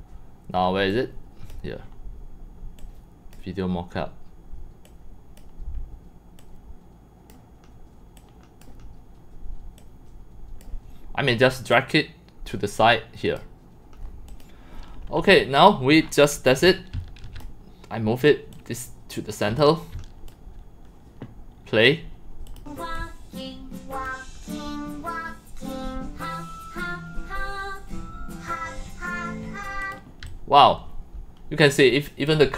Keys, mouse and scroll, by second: 0.9 click, 2.8 click, 4.9-5.4 drag, 5.7-7.2 drag, 8.2 click, 9.8 click, 11.7-13.4 drag, 14.3 click, 16.0-16.6 scroll, 16.4-17.8 typing, 16.8-17.4 right drag, 17.4 click, 18.5-19.3 drag, 19.3-21.0 typing, 19.6 click, 19.9-20.3 drag, 22.6-23.0 drag, 23.0-24.0 c, 24.1 drag, 27.7 click, 30.2-31.2 c, 31.2-32.3 c, 31.8-32.3 drag.